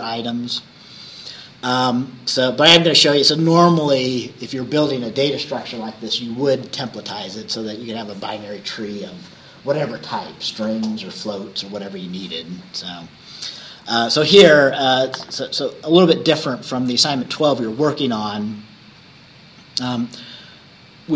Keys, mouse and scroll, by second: 2.1-2.5 scroll down 2.